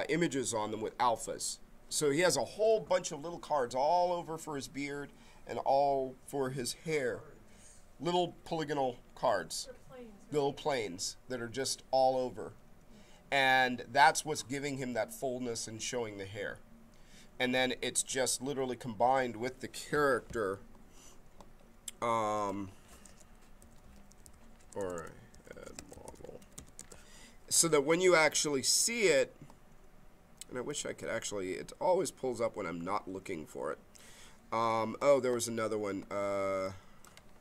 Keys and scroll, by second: 23.1-27.0 typing.